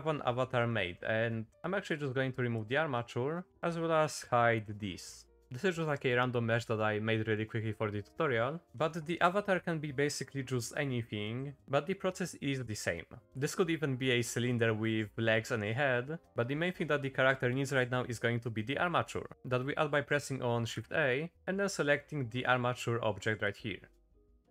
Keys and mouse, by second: 0.9 middle click, 1.9 x, 3.5 middle click, 3.5 click, 4.5 h, 6.6 middle click, 20.7 shift+a, 24.4 middle click.